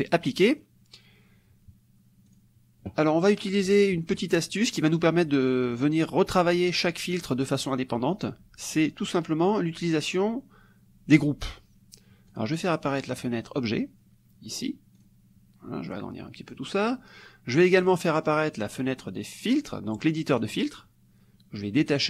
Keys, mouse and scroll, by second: 0.3 click, 2.3 click, 3.5 middle click, 12.3 click, 13.1 click, 15.0 click, 15.9 click, 17.9 click, 20.4 click, 21.7-22.0 drag.